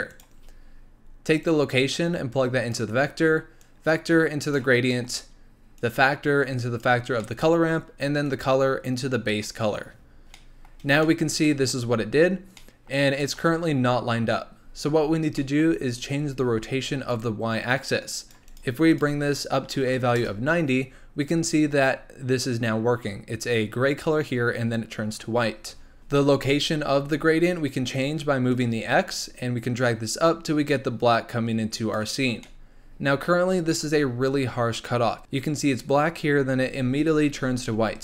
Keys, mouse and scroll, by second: 0.4-1.4 scroll up 4, 1.4 click, 3.6 click, 4.9-5.7 middle drag, 5.7 click, 7.2-8.2 middle drag, 8.2 click, 10.1 scroll up 2, 10.3-15.0 middle drag, 15.0-15.3 scroll up 2, 15.3 middle click, 15.7-17.1 scroll up 1, 17.1-18.6 drag, 18.9-26.3 drag, 28.5-31.5 drag, 32.4-33.5 middle drag, 33.5-33.8 scroll up 2, 34.3-35.2 scroll down 1.